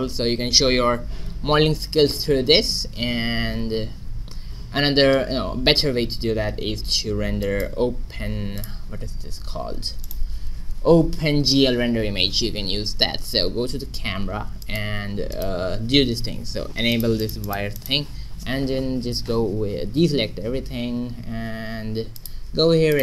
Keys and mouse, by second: 4.4 shift+z, 5.9 shift+z, 7.1 a, 7.4 middle click, 8.6 middle click, 13.3 q, 14.3 middle click, 15.2 right click, 16.9-19.5 drag, 20.1 a, 22.1 click.